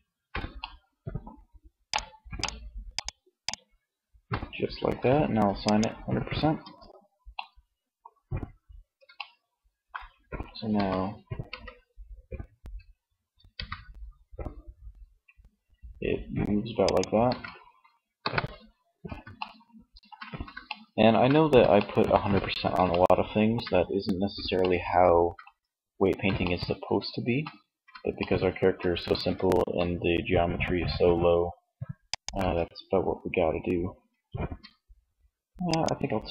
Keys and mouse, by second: 1.2 click, 1.6-4.4 right drag, 4.7 click, 5.6 Tab, 9.9 r, 16.0 click, 16.5 ctrl+z, 17.2 KP_1, 18.3 middle click, 19.7 shift+middle click, 28.9 r, 31.7 ctrl+z, 33.7 Tab.